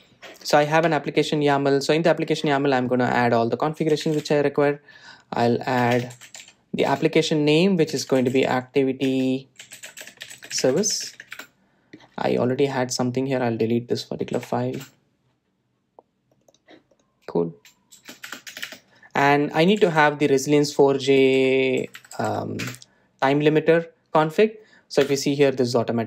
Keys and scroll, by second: 8.4 Return, 15.9 Delete, 24.1 Return.